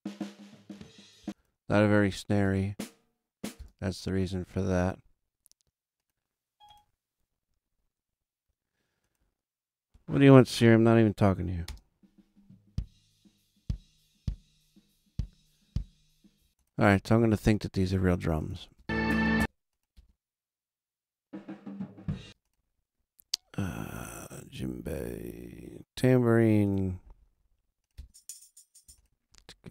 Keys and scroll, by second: 1.2 space, 11.6 space, 16.4 space, 18.7 space, 22.2 space, 27.9 space.